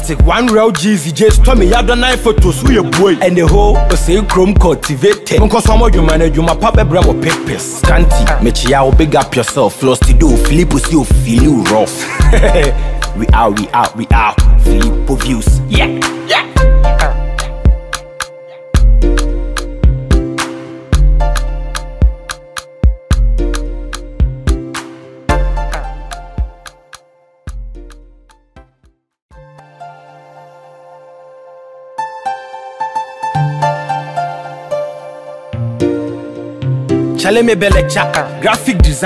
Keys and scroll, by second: 0.2 Up, 2.1 ctrl+i, 13.0 Down, 36.5 ctrl+a.